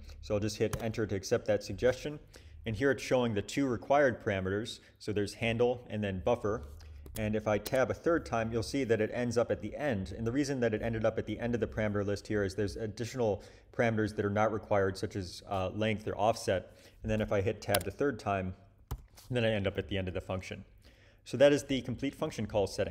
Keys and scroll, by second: 0.7 Return, 7.0 Tab, 7.6 Tab, 17.7 Tab, 18.9 ;.